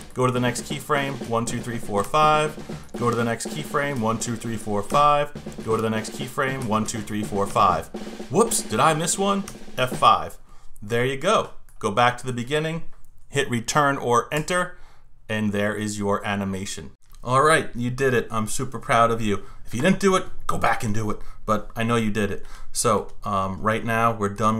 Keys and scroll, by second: 1.2 F5, 3.9 F5, 6.6 F5, 9.4 F5, 14.3 Return.